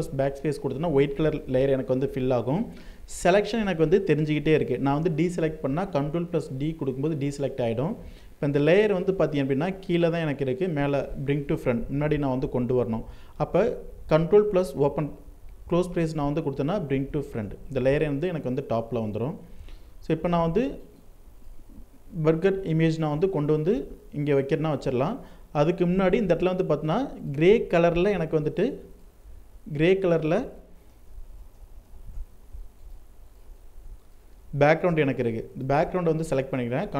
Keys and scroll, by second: 5.8 ctrl+d, 36.3 ctrl+shift+n.